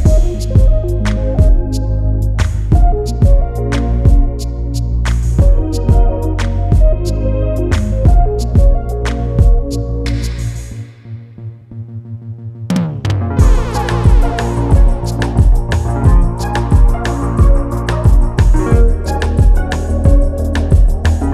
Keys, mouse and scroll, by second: 0.5-2.6 drag, 4.3-6.3 drag, 8.2 click, 9.2 scroll down 1, 9.4 middle click, 9.8 click, 11.0 middle click, 11.4 click, 12.1-14.2 drag, 15.3 click, 16.7 click, 18.3-20.3 drag.